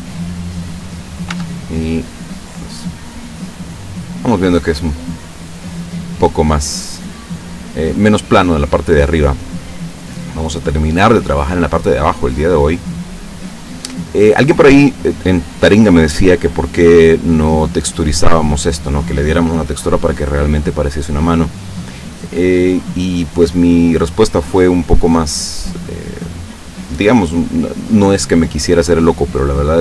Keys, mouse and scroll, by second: 1.4 Tab, 1.8-9.8 drag, 10.4 scroll up 1, 11.0 click, 12.1-13.9 drag.